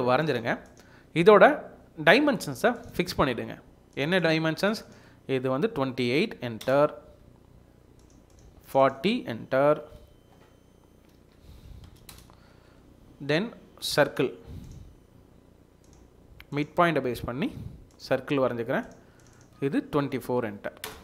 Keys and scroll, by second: 6.0 typing, 6.6 Return, 9.7 typing, 11.3-12.3 typing, 19.9-20.8 typing.